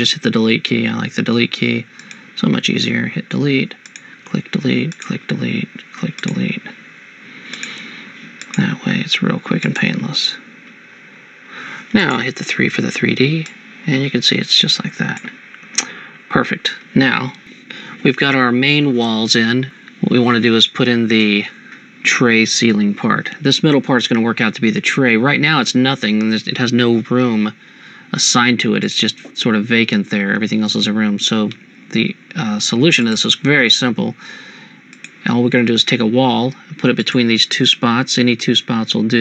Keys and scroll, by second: 0.9 Delete, 12.7 3, 15.7 Escape.